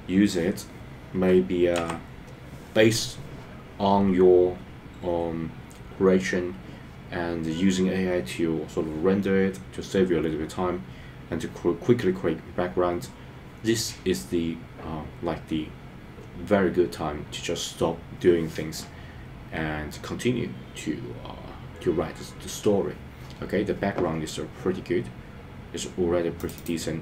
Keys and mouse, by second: 2.0 F12.